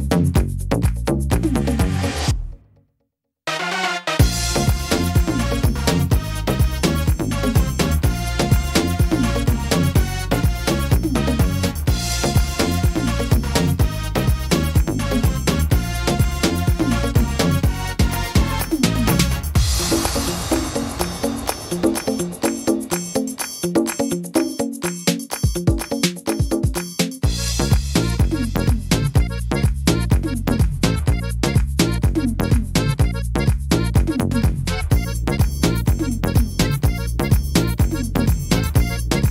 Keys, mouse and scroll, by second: 3.1-3.6 scroll down 3, 3.6 shift+middle click, 4.0 scroll up 2, 4.4 middle click, 5.8 l, 6.8 shift+d, 7.9 click, 10.5 b, 15.8 middle click, 17.2 click, 18.7 middle click, 19.1-19.7 scroll down 2, 19.5 middle click, 20.4 scroll down 1, 20.8 middle click, 21.2 scroll up 4, 21.8 scroll up 1, 21.8 shift+middle click, 22.8 click, 23.3 middle click, 24.3 click, 25.4 click, 26.1 middle click, 26.8-28.4 scroll down 1, 31.3 middle click, 31.7-32.1 scroll up 4, 32.8 click, 34.4 click, 36.2 click, 36.6-38.1 scroll down 9, 38.1 scroll down 2, 38.1 s.